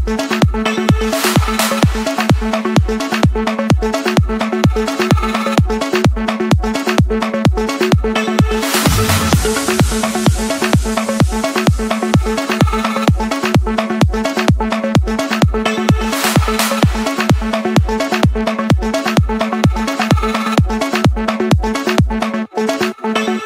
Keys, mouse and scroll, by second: 0.0-0.1 typing, 1.3 Return, 2.3 Escape, 3.8 click, 4.6 click, 4.9-5.4 scroll, 7.2 click, 7.5-8.7 scroll, 8.7 Escape, 11.4 click, 12.4 click, 13.3-17.4 typing, 18.2 Return, 19.1 Escape, 19.6-20.7 middle drag.